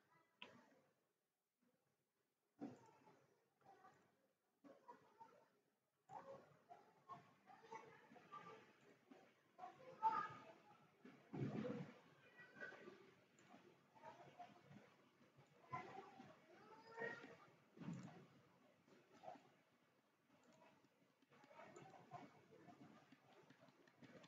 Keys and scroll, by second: 19.3 Escape, 20.0 Escape, 21.2 Escape, 21.4 Escape, 21.6 Escape, 22.8 Escape, 23.2 Escape, 23.4 Escape, 23.6 Escape, 23.7 Escape, 23.9 Escape, 24.1 Escape.